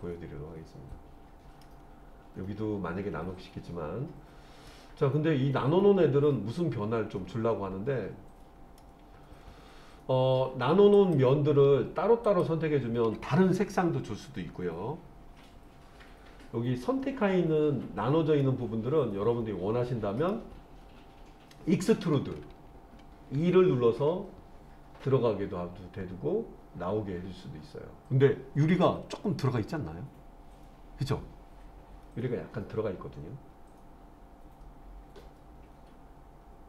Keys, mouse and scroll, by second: 4.7-8.8 middle drag, 10.9 click, 12.3 shift+click, 17.4-18.4 scroll up 1, 18.4-20.3 middle drag, 23.4 e.